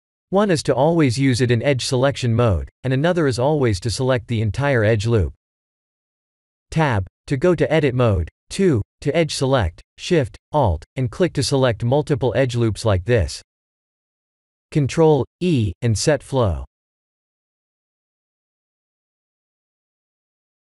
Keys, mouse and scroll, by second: 1.0-2.6 scroll up 9, 4.4 ctrl+z, 4.8 ctrl+z, 5.7-7.6 scroll down 3, 6.0 Tab, 7.8 ctrl+a, 9.3 Tab, 10.1 click, 11.4 2, 11.9 alt+click, 12.7 alt+shift+click, 15.3 ctrl+e.